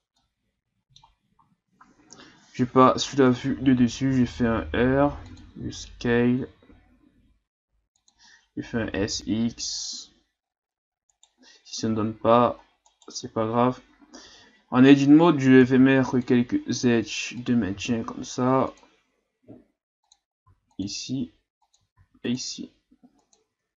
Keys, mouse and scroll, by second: 0.2-2.1 middle drag, 2.1 KP_7, 3.4-3.9 ctrl+scroll down 3, 4.1 r, 5.6 s, 8.7 s, 11.8 Tab, 12.2 a, 12.9 right click, 14.2 Tab, 15.6 ctrl+r, 17.7 ctrl+r, 22.0 ctrl+r, 23.5 Tab.